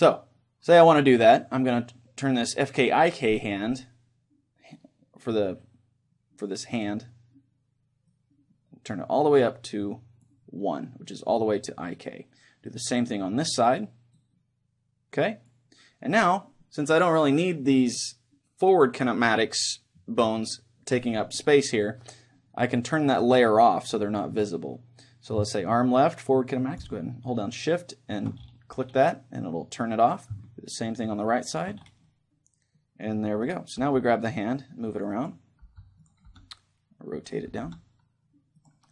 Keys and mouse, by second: 8.1-10.3 drag, 12.7-14.2 right drag, 14.2 middle click, 14.6-15.9 drag, 26.8-28.7 drag, 30.8-32.5 drag, 32.1-34.0 middle drag, 33.5-35.1 right drag, 33.8 g, 35.3-38.9 drag, 35.8 g, 36.5 r, 37.7 r.